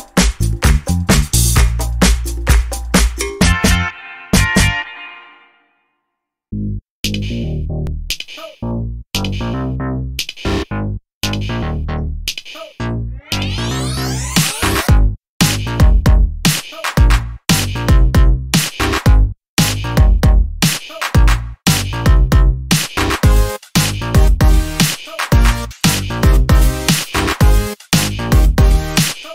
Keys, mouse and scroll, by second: 0.7-2.2 drag, 3.0 click, 3.8-6.7 drag, 8.1 ctrl+d, 12.0-14.7 ctrl+drag, 17.3 click, 18.7 click, 20.8 click, 22.3 click, 26.4 click.